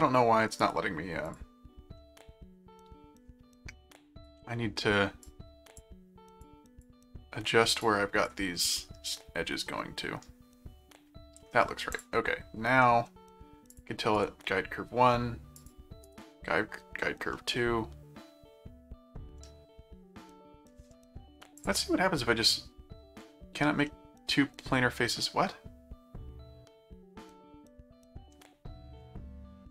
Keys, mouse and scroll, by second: 0.6 right click, 1.3 click, 2.0 middle click, 3.9 click, 5.2 click, 6.4 click, 7.8 click, 8.8-11.4 middle drag, 11.9 click, 12.8 middle click, 13.7 click, 14.2 right click, 15.6 click, 16.0 right click, 17.3-20.7 middle drag, 21.6 click, 23.9 middle click, 25.2-28.3 middle drag.